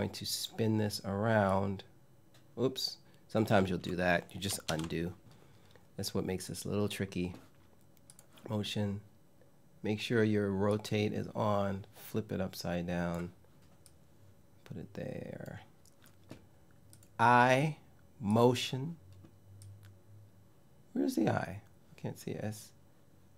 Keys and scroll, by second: 4.3 super+z.